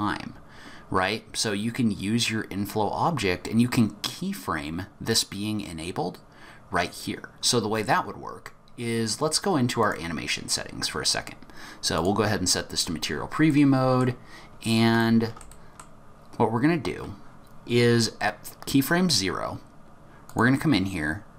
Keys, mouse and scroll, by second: 12.0 click, 12.5-13.4 scroll up 11, 13.4 middle click, 14.3-14.9 scroll up 1, 14.9 scroll up 1, 15.0 shift+middle click, 15.5 middle click, 16.2-16.6 scroll up 1, 20.2 click.